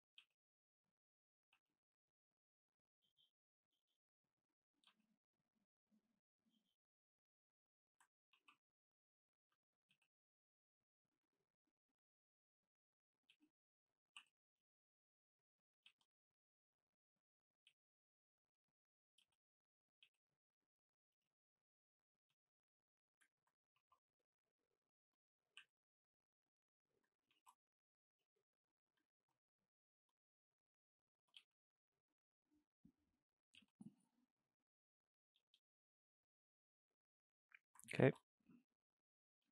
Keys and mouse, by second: 0.3 g, 1.4 click, 1.6 g, 2.5 middle click, 3.3 click, 3.6-4.7 middle drag, 4.7 click, 4.9 g, 6.7 shift+click, 7.0-8.4 middle drag, 8.4 ctrl+t, 9.4 middle click, 10.0 g, 11.7 click, 11.8-12.5 middle drag, 12.5 click, 12.7-13.4 middle drag, 13.4 g, 15.6 click, 15.9 g, 16.7-17.5 middle drag, 17.5 click, 17.7 g, 18.9 click, 19.3 g, 20.0 click, 20.1 g, 21.1 click, 21.2 g, 21.9 click, 22.3 g, 23.2 shift+click, 23.3 middle click, 23.8 ctrl+t, 25.4 click, 25.7 e, 26.7 middle click, 27.4 ctrl+t, 28.9 click, 29.2 ctrl+t, 30.5 click, 30.7-31.4 middle drag, 31.4 g, 32.6-33.4 middle drag, 33.4 click, 33.6 g, 34.6-35.2 middle drag, 35.2 click, 35.5 g, 36.4-38.1 middle drag, 38.1 ctrl+t, 38.9-39.5 middle drag.